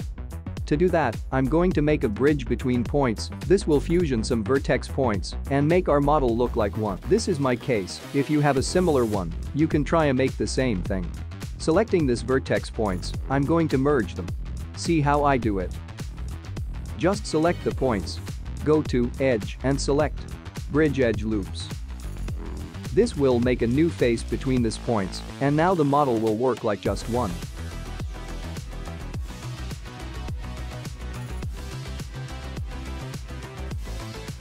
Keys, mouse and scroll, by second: 0.0 click, 0.0 scroll up 4, 0.0 space, 0.1 middle click, 1.7 `, 3.2 click, 3.7 click, 4.1 Tab, 5.9 click, 6.9 click, 13.0 middle click, 16.1 middle click, 19.5 click, 22.0 middle click, 27.3-27.8 scroll down 3, 27.8 middle click, 29.6 shift+middle click, 31.0 click, 31.2 Tab, 31.8 click, 32.4 middle click, 32.7 scroll down 4, 33.0 scroll up 2, 33.8 shift+middle click.